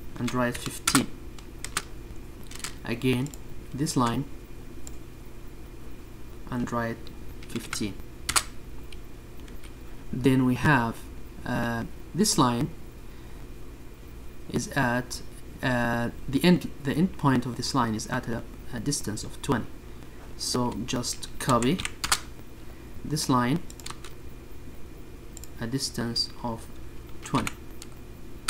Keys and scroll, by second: 0.5 space, 5.2 1, 5.5 5, 5.8 Return, 12.8 1, 13.8 Return, 15.0 Escape.